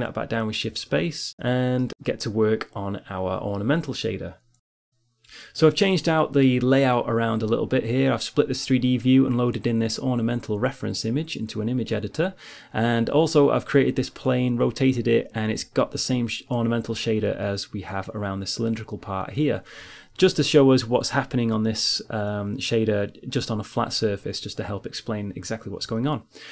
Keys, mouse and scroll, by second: 14.6-25.7 drag.